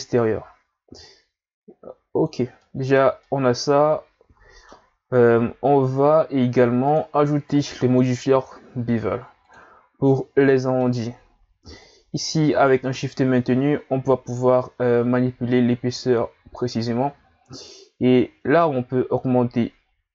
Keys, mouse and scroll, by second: 1.0 shift+click, 2.6-4.9 middle drag, 4.9-6.8 scroll up 1, 6.8 click, 10.1-11.8 middle drag, 11.8 shift+click, 18.6 click, 19.9-20.1 scroll down 2.